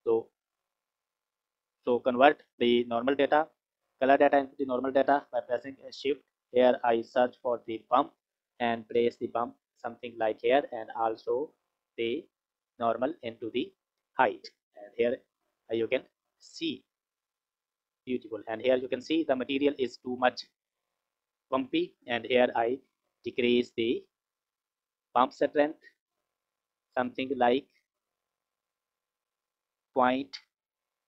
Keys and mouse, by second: 5.5 shift+a, 9.7 click, 11.4 click, 11.8 click, 20.2 click, 21.8 click, 23.0-25.0 drag, 25.0-27.1 middle drag, 27.1 click, 29.4-31.0 drag.